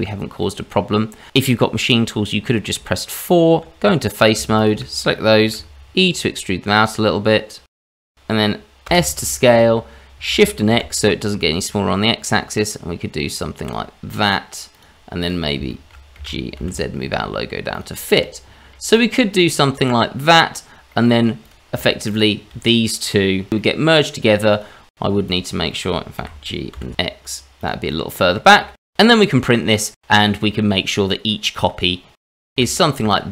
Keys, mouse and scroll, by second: 0.4 middle click, 2.2 scroll up 1, 2.8 Tab, 4.2 click, 4.6 shift+click, 5.5 e, 7.1 Tab, 7.5 middle click, 8.9 s, 14.7 click, 15.2 click, 15.7 shift+middle click, 16.1 g, 17.9 scroll down 2, 18.2 middle click, 18.9 click, 19.3 scroll up 2, 20.9 middle click, 21.4 click, 22.1 shift+click, 23.6 scroll down 2, 23.8 scroll up 2, 24.1 middle click, 24.7 click, 25.3 click, 25.7 middle click, 26.2 g, 28.2 middle click, 28.5 shift+middle click, 28.9 middle click, 29.1 click, 29.4 middle click, 30.8 middle click, 31.6-32.2 scroll down 2, 32.3 click, 32.6 r, 33.2 middle click.